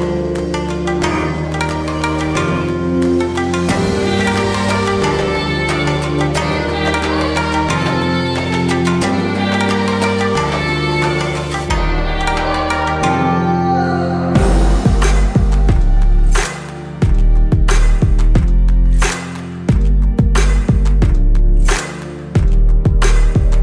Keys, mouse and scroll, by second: 2.8-5.3 shift+drag, 7.3-8.9 alt+shift+drag, 16.7 shift+right click, 17.5 shift+click.